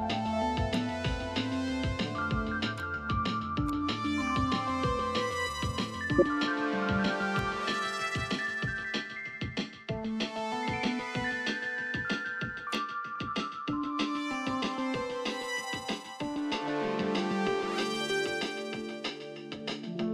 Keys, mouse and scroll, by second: 6.0 ctrl+t, 15.6-16.0 scroll down 1, 16.4 scroll up 1, 18.8 alt+scroll down 1.